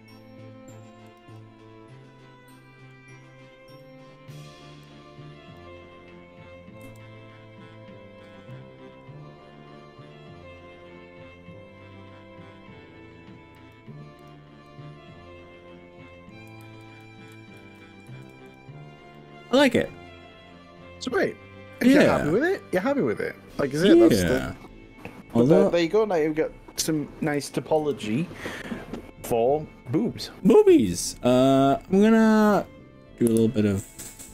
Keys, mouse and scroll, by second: 1.2 click, 1.4-3.0 middle drag, 3.8-4.4 middle drag, 4.8 click, 6.8 g, 8.8-9.2 scroll down 2, 9.2-10.6 scroll up 8, 11.2-12.0 scroll up 3, 13.6 click, 14.2 click, 14.7-16.4 middle drag, 16.6 ctrl+z, 17.6 ctrl+shift+z, 18.5 click, 18.8 scroll down 2, 19.2-22.9 middle drag, 24.4 click, 24.7 middle click, 25.6 click, 27.3 KP_1, 27.8 KP_3, 33.3 KP_1, 34.2 KP_3.